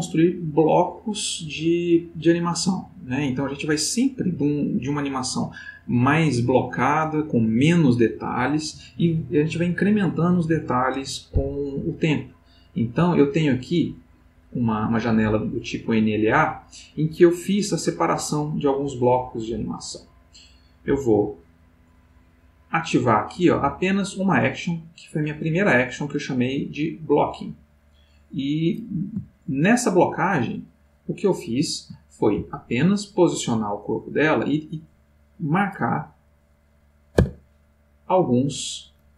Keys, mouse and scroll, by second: 12.4 middle click, 14.1 middle click, 19.5 click, 20.1 click, 20.7 click, 21.5 click, 22.9 click, 24.0 click, 25.8-29.0 drag, 29.4-32.0 ctrl+middle drag, 33.6-35.3 drag, 36.7 click, 37.2 Tab.